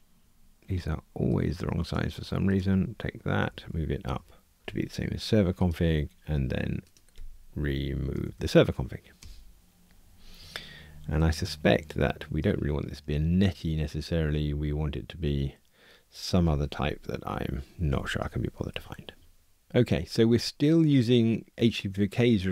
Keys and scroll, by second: 8.1 alt+Return, 11.3 super+b, 17.9 super+[.